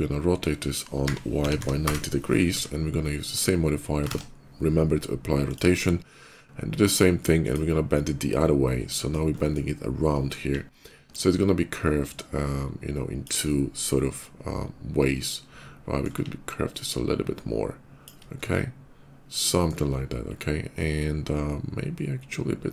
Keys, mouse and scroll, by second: 0.7-2.4 typing, 1.7 Return, 2.0 middle click, 2.9 middle click, 3.9 ctrl+a, 5.2 click, 7.2 click, 8.2 middle click, 9.0 middle click, 9.9 middle click, 10.9-13.1 ctrl+drag, 13.2-15.9 ctrl+middle drag, 16.6-17.9 ctrl+drag, 18.2-19.4 ctrl+middle drag, 20.6-22.7 ctrl+middle drag.